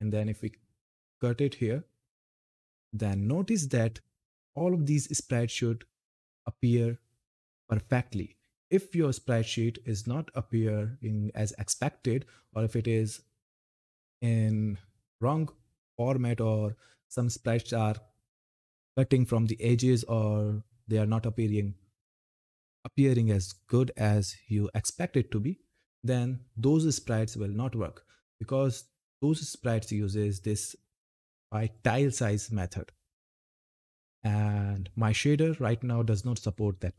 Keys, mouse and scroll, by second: 0.6 click, 1.7 scroll down 1, 5.3 scroll up 1, 6.9 scroll down 1, 15.0 scroll up 1, 15.8-16.5 scroll down 1, 25.9-26.9 scroll down 1, 27.9-29.5 scroll up 1, 31.4 click, 33.6 scroll down 1.